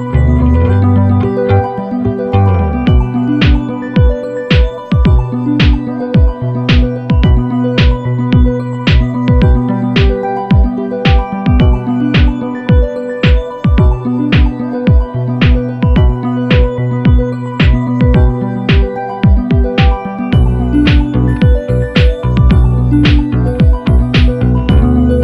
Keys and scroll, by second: 6.2-7.0 typing, 10.2 super+=.